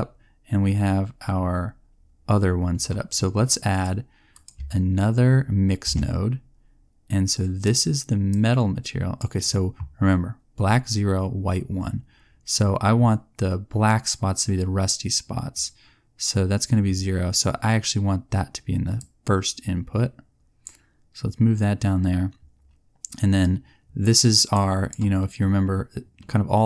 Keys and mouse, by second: 5.8 shift+d, 14.4-18.9 middle drag, 24.5 right click.